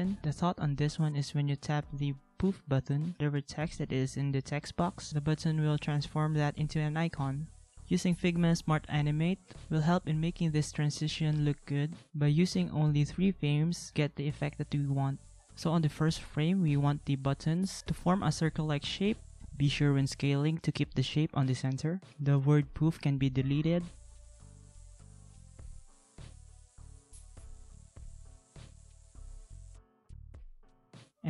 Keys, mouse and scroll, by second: 11.1 ctrl+c, 11.4 ctrl+v, 12.0 ctrl+=, 15.0 alt+click, 16.2 ctrl+z, 17.9 ctrl+g, 19.0 ctrl+z, 22.4 alt+click, 25.2 ctrl+a, 26.0 ctrl+z, 26.6 ctrl+a, 28.1 ctrl+shift+g, 30.9 ctrl+z.